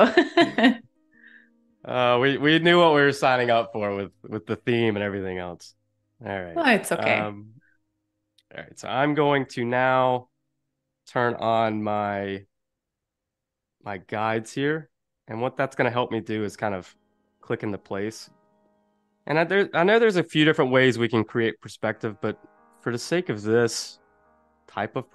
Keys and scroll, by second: 0.2 super+=, 0.5 space, 1.1 super+=, 1.3 space, 4.0 space, 5.3 p, 9.3 super+u.